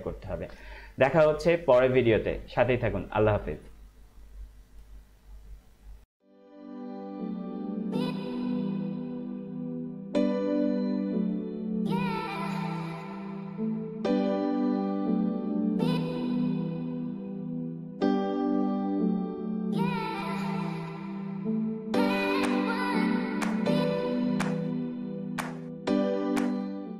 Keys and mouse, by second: 6.0 click.